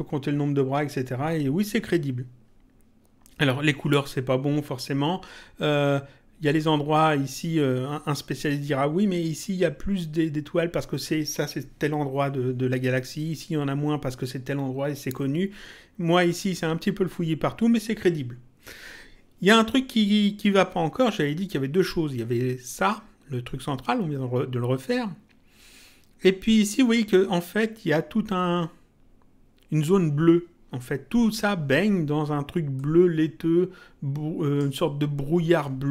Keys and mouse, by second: 6.4 click, 32.7 click.